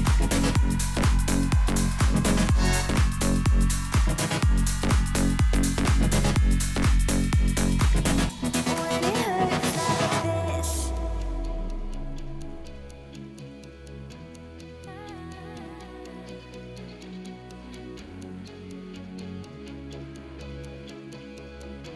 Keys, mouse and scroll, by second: 7.1 alt+scroll down 1, 8.4 alt+scroll up 1, 8.6 click, 12.5-13.2 typing, 12.7 click, 15.0 click, 19.4 click.